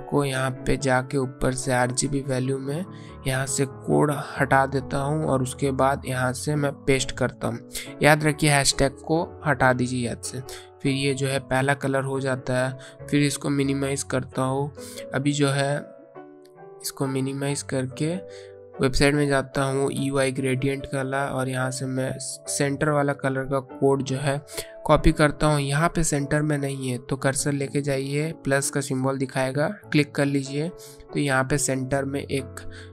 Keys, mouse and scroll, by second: 0.9 click, 4.8 BackSpace, 8.4 click, 9.1 BackSpace, 10.2 click, 29.7 click.